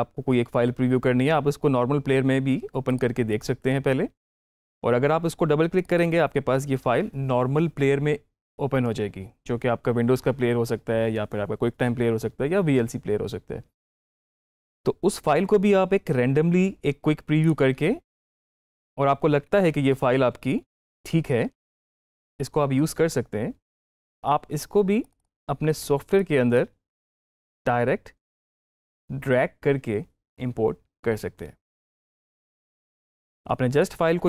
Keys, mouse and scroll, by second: 2.7 click, 5.6 click, 22.1 click, 24.9-32.7 drag.